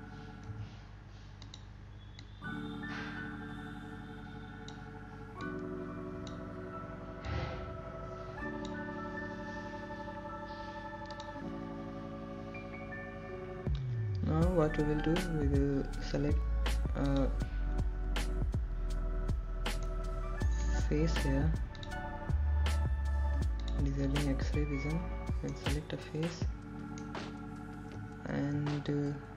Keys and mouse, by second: 0.4 click, 0.6 click, 2.0 ctrl+z, 3.5 x, 5.3-7.7 drag, 8.5 click, 10.3-11.7 drag, 20.1 click, 22.9 middle click, 24.2 3, 26.7 click, 28.6-29.3 middle drag.